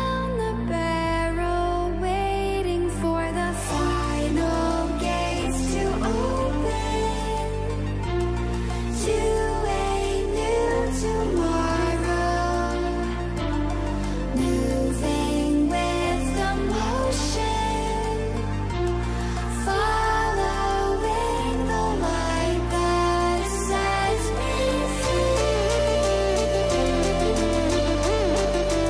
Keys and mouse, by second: 0.4 click, 1.1 click, 1.9 click, 7.0-8.2 drag, 9.0-10.2 drag, 10.5 click, 12.4 click, 15.8 click, 21.6 click, 24.2 n, 26.1 shift+middle click, 28.3 click.